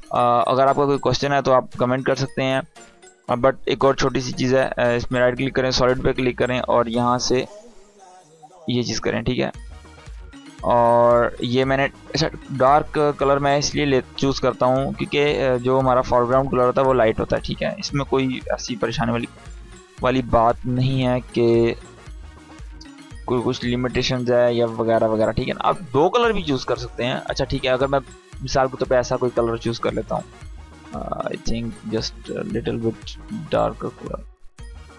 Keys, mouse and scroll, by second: 0.5 space, 2.1 right click, 2.7 click, 5.0-7.3 drag, 12.9 ctrl+k, 14.6 click, 18.8 ctrl+shift+y, 20.3-23.8 drag, 27.3-34.9 drag, 29.8-34.9 drag.